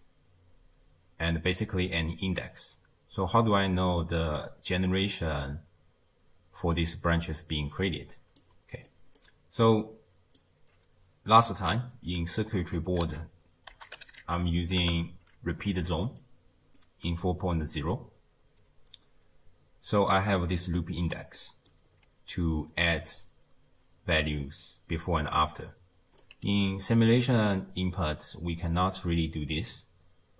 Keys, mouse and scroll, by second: 1.3 click, 9.2-13.1 middle drag, 13.1 ctrl+a, 14.1 o, 16.8-19.8 middle drag, 21.2 d, 21.4 click, 21.7 d, 25.4 d, 25.7 right click, 26.2 d, 27.8 click.